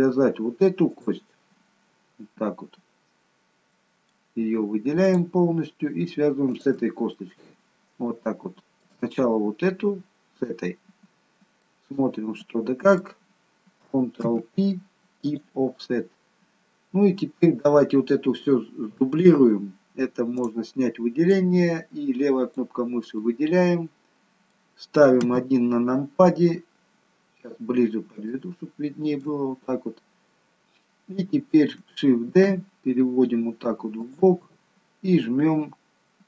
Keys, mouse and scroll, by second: 1.0 click, 1.5-2.0 scroll down 1, 3.1-3.7 scroll down 2, 3.7 middle click, 5.0 click, 6.5 shift+click, 7.2 middle click, 8.4 shift+middle click, 10.9-11.5 scroll up 1, 11.5-12.0 scroll up 1, 14.2 ctrl+p, 16.2-17.0 scroll down 2, 17.0 scroll down 1, 20.4 click, 21.3 click, 23.2 middle click, 25.5 KP_1, 27.1-27.6 scroll up 1, 28.1 scroll up 2, 28.4 shift+middle click, 29.8-30.7 scroll up 1, 32.3 shift+d.